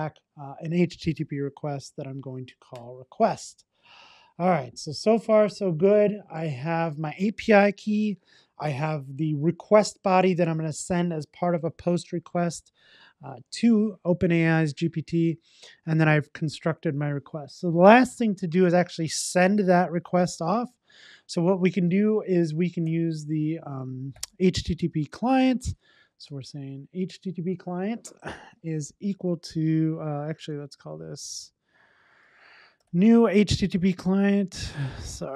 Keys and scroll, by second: 2.9 Return, 26.4 Return, 33.5 Return.